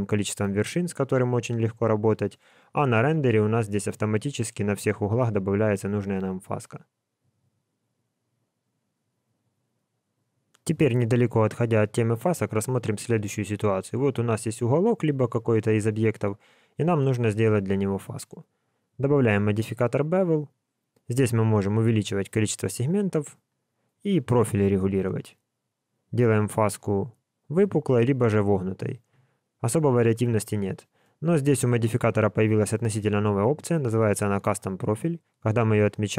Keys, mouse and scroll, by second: 1.0 Tab, 2.0 click, 3.0 alt+a.